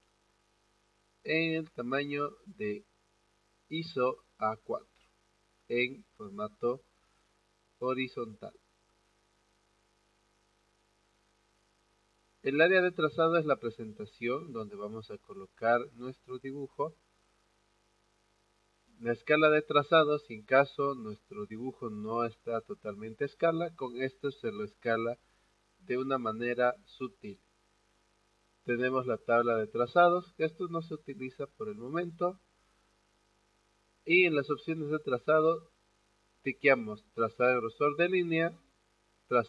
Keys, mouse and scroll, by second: 0.2-2.2 scroll up 2, 8.6 click.